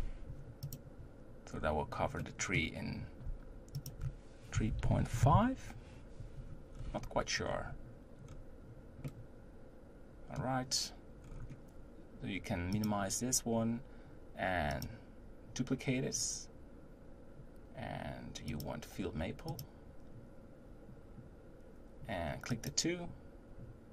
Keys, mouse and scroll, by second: 0.6 click, 1.5-2.0 scroll up 2, 2.2-3.7 middle drag, 3.7-6.7 drag, 6.7-7.1 scroll down 3, 7.4 scroll up 1, 8.3-9.0 scroll down 3, 9.0-11.2 middle drag, 11.2-12.0 scroll up 5, 12.9 click, 14.7 click, 18.5-23.3 drag.